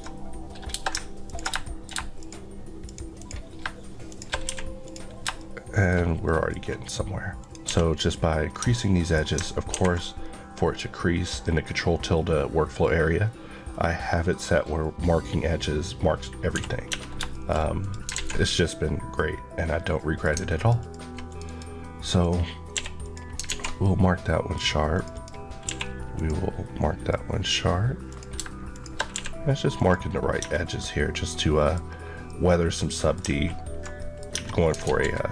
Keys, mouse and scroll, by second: 1.1 ctrl+click, 1.5 shift+middle click, 2.1 shift+click, 2.7 shift+click, 2.7 shift+Left, 3.9 shift+click, 4.3 q, 4.7 click, 5.2 shift+middle click, 6.5 scroll up 1, 7.2 click, 7.5 q, 7.8 click, 8.4 scroll down 1, 8.4 Tab, 8.7 middle click, 16.4 Escape, 16.7 Tab, 17.2 middle click, 17.6 click, 18.0 alt+z, 18.3 middle click, 20.7 click, 21.3 click, 22.0 click, 22.6 q, 22.9 click, 23.3 alt+z, 23.7 middle click, 24.8 click, 25.5 q, 26.0 click, 26.6-26.9 scroll down 1, 26.9 middle click, 28.0 click, 28.6 shift+click, 29.0 q, 29.6 click, 30.3 Tab, 30.4 middle click, 31.8-32.1 scroll, 34.1-34.5 scroll up 1, 34.5 alt+Tab, 34.7 alt+z.